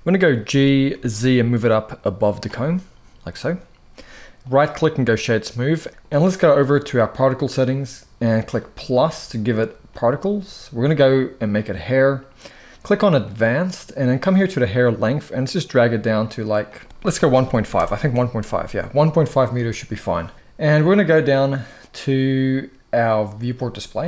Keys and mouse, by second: 0.2 g, 0.6 z, 2.4-3.0 middle drag, 4.2-5.0 right drag, 6.9 click, 8.3 click, 11.3 click, 12.9 click, 14.3-15.9 drag, 16.5 click, 23.3 click.